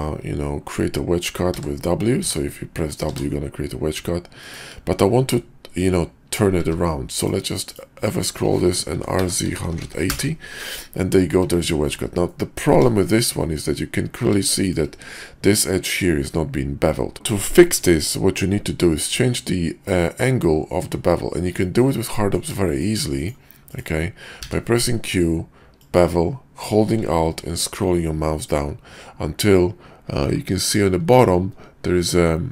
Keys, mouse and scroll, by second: 5.3-5.8 middle drag, 6.6 q, 8.9 r, 11.8 shift+2, 12.3-12.6 drag, 13.0 shift+click, 13.4-13.8 drag, 14.4 shift+middle drag, 17.1 shift+middle click, 21.6 middle drag, 22.1 middle drag, 22.6 shift+click, 23.6 click, 24.4 q.